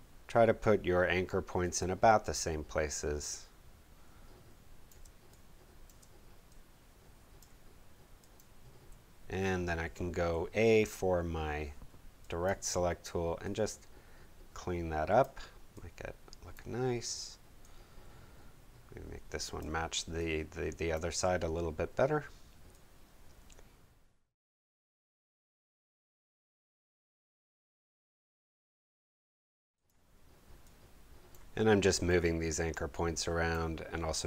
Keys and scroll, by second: 5.0 space, 8.8 a, 10.3 a, 24.5 space.